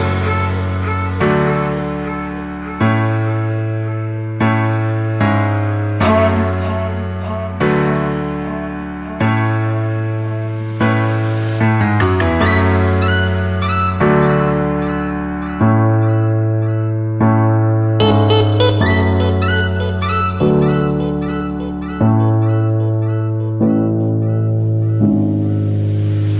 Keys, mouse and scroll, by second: 0.0 s, 0.1 click, 7.5 click, 13.7 click.